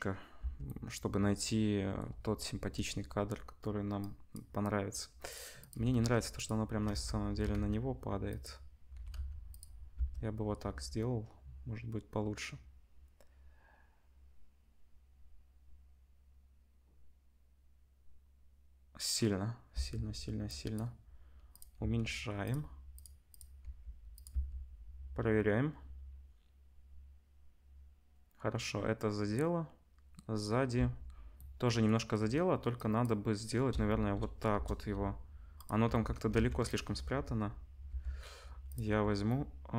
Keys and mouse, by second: 0.4 space, 2.5 KP_0, 5.3 middle click, 5.5 click, 5.6-20.4 middle drag, 5.7 r, 6.8 ctrl+z, 7.3 r, 8.9 r, 9.9 space, 19.7 space, 20.4-21.5 drag, 21.5-22.9 middle drag, 21.8 s, 22.9 click, 23.0 middle click, 23.3 click, 23.3-32.7 middle drag, 23.6 g, 24.3 space, 30.7 space, 32.7-35.6 drag, 34.5 KP_0, 35.6-36.7 middle drag, 35.8 Tab, 36.3 ctrl+s, 36.7 click, 36.7-39.7 middle drag, 37.9 l, 38.8 l.